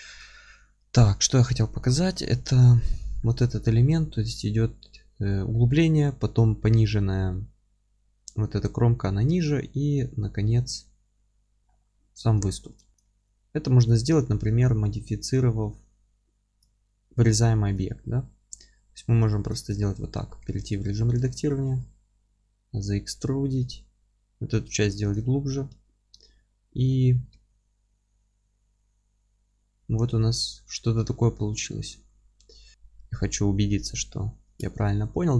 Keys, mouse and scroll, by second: 0.0 scroll up 1, 1.9 KP_7, 3.0 scroll up 2, 3.5 middle click, 11.7 scroll down 1, 12.0-12.4 scroll up 1, 12.4 alt+middle click, 12.9 scroll up 1, 13.0 alt+middle click, 13.9 click, 14.9-17.6 scroll up 1, 17.6 middle click, 17.9 alt+q, 18.3 alt+middle click, 18.7-19.5 scroll up 1, 19.5 alt+middle click, 19.8 Tab, 20.4 3, 20.7 click, 21.0 middle click, 21.7 e, 22.9 click, 24.0-24.5 scroll up 1, 24.5 e, 25.1 click, 25.3-25.7 scroll down 1, 25.7 Tab, 27.3 alt+q, 27.9-32.0 alt+middle drag, 29.9-30.2 scroll up 1, 32.0-32.4 scroll up 2.